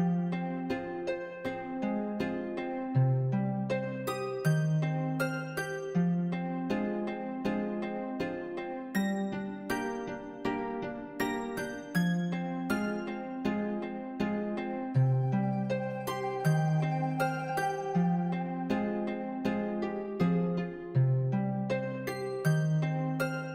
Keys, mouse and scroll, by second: 0.0-1.1 typing, 0.1 middle click, 0.6 middle click, 1.6 middle click, 2.1 g, 3.4 s, 4.1 Tab, 4.2 middle click, 4.7 Tab, 4.8 s, 5.7 Tab, 5.8-6.6 middle drag, 6.6-7.4 middle drag, 7.6 click, 7.8 Delete, 8.0 click, 8.1 g, 9.0 click, 9.2 g, 9.8 s, 10.1 g, 10.9 middle click, 11.0 g, 11.3 middle drag, 11.5 click, 11.6 middle drag, 11.8 Tab, 12.0 click, 12.6 1, 12.7 click, 13.0 2, 13.0 click, 13.1 middle click, 14.0 shift+click, 14.0 middle click, 14.2 scroll down 2, 14.5 shift+click, 14.6 middle click, 14.7 scroll up 2, 14.9 scroll down 1, 15.0 middle click, 15.1 ctrl+b, 16.2 Tab, 16.3 middle click, 16.8 click, 16.9 g, 18.9 click, 19.1 g, 19.7 Tab, 19.9 Tab, 20.1 click, 20.5 g, 23.0 click.